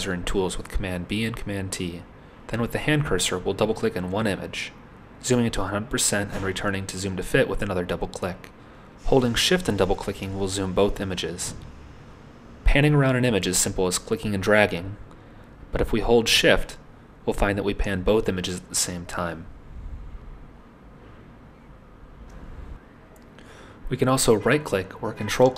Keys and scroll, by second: 0.1 super+t.